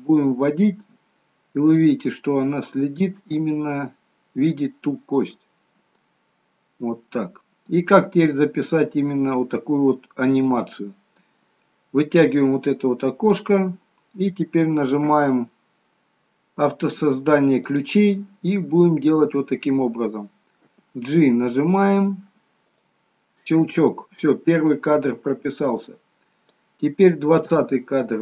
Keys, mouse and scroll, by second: 12.4 click, 17.9 click, 20.7 g, 24.9 click.